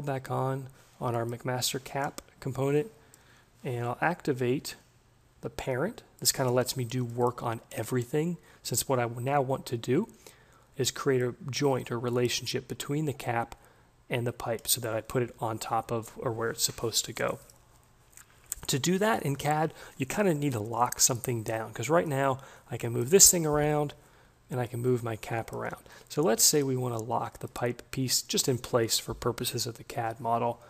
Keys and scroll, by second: 23.3 ctrl+z.